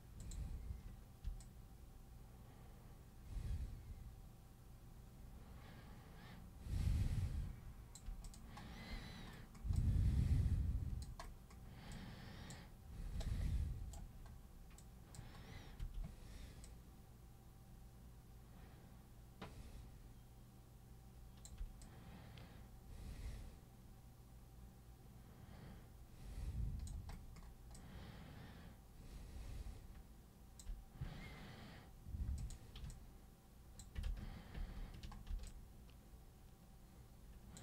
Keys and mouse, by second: 0.2 super+click, 1.4-8.0 alt+super+drag, 8.2 super+click, 9.8-11.0 alt+super+drag, 11.9 alt+super+click, 13.2 super+right click, 14.8 super+click, 15.8 super+w, 16.6-21.4 super+drag, 21.8-26.9 alt+super+drag, 27.7-30.6 alt+super+drag, 32.4 super+click, 32.9 alt+super+click, 34.1 ctrl+super+z, 34.6 ctrl+super+z, 35.4-37.6 alt+super+drag.